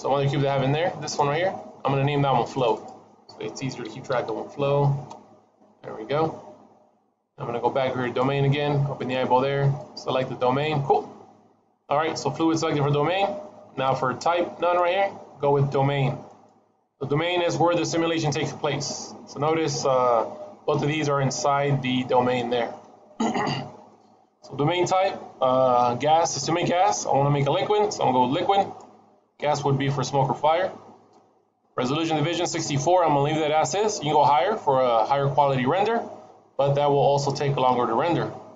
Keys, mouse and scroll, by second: 0.2 middle click, 0.8 click, 2.4 click, 2.6 click, 7.8 click, 8.8 click, 9.6 click, 14.5 click, 17.7 middle click, 21.0-21.4 scroll down 2, 21.4 middle click, 26.3 click, 30.6-34.3 scroll down 3.